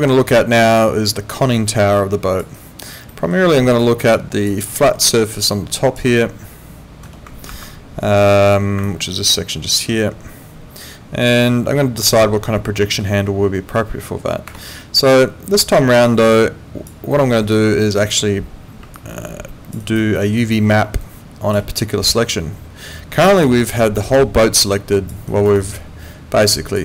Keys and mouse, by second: 2.5 alt+right click, 3.1 alt+middle click, 3.5 alt+right click, 4.1 alt+click, 4.7 alt+middle click, 5.3 alt+click, 6.2 alt+middle click, 7.4 ctrl+2, 14.5 Escape, 16.3 alt+click, 17.1 alt+middle click, 17.5 alt+click, 18.9 alt+click, 19.8 alt+right click, 20.2 alt+middle click, 20.4 alt+right click, 20.7 alt+click, 23.2 alt+click, 23.5 alt+right click, 24.0 alt+click, 25.3 alt+right click, 25.6 alt+click.